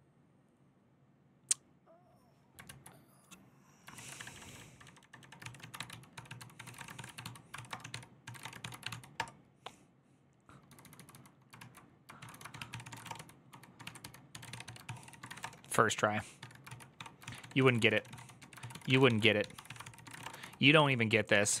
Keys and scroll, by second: 2.5 alt+{, 3.7 ctrl+c, 3.9-9.1 typing, 10.5-21.6 typing, 11.4 ctrl+o, 11.9 ctrl+w, 12.3 ctrl+w, 12.3 ctrl+o, 12.5 ctrl+c.